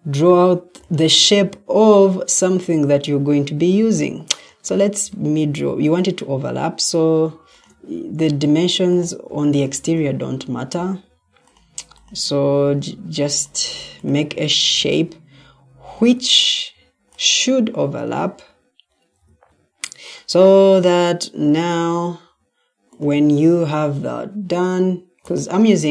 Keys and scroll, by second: 0.5 Escape, 19.2 Escape.